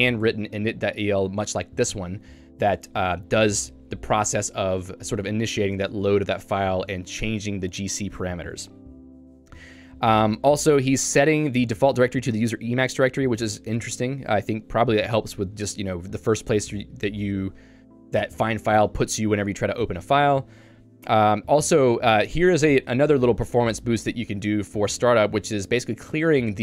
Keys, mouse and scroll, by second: 3.1 j, 4.5 k, 8.6-12.2 typing, 13.3 h, 13.7 h, 14.3 j, 22.5 shift+v.